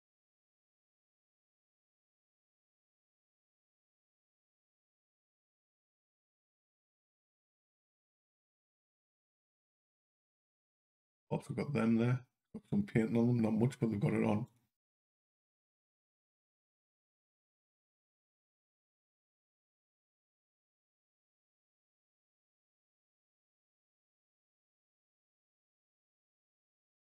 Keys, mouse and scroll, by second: 0.8 l, 2.2 click, 6.3 click, 8.3 click, 9.1 Up, 9.8 Down, 12.6 click, 17.0 l, 17.6 l, 21.0 click, 23.5 click, 26.6 Down.